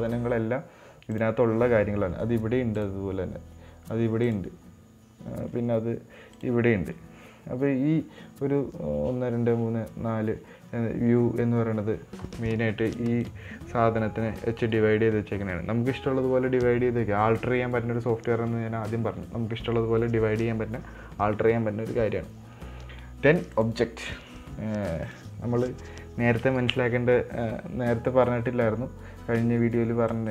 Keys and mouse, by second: 4.7-6.1 drag.